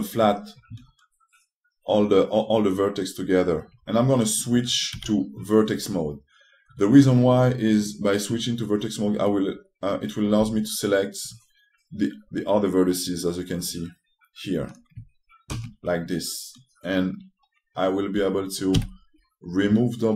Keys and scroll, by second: 0.1 ctrl+w, 5.7 3, 11.1 s, 19.4 d.